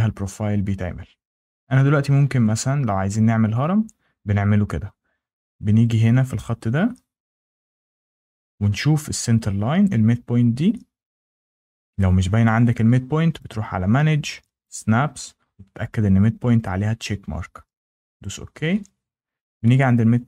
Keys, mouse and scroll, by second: 0.3 scroll, 2.4 scroll, 7.9 Escape, 13.4 click, 14.6 click, 18.1 click, 19.6 click.